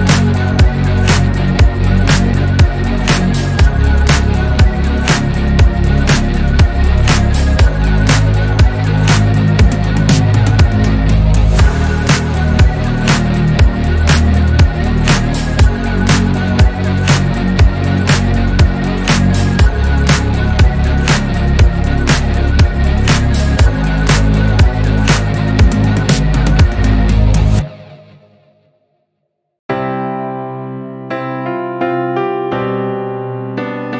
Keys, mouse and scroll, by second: 2.5 click, 3.3-4.3 drag, 4.3 r, 6.8 click, 8.1 drag, 8.4-10.4 shift+middle drag, 10.4-12.5 drag, 12.8 r, 14.9 g, 16.2 click, 18.6 click, 19.1 scroll down 1, 19.4 Tab, 19.8 scroll up 2, 20.3 shift+middle click, 21.1 Tab, 21.8-23.9 drag, 24.2 scroll down 1, 24.3-25.0 middle drag, 25.0 Tab, 25.4-25.8 scroll up 2, 25.9-27.1 middle drag, 27.1 KP_3, 27.7 Tab, 28.6 click, 30.8-31.6 middle drag, 31.6 drag, 32.1 click, 33.0 click.